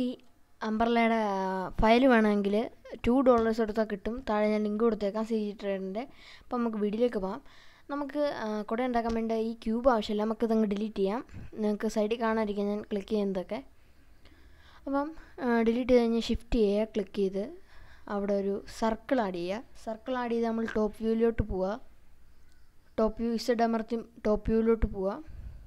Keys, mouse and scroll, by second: 1.4-2.2 middle drag, 2.5-3.0 scroll up 1, 3.3-4.8 middle drag, 5.2 middle click, 8.5 click, 10.6 Delete, 11.6 middle click, 15.4 shift+a, 19.8-20.6 middle drag, 20.9-21.4 scroll up 2, 22.4-23.3 middle drag, 22.4 scroll up 1, 25.2 Tab.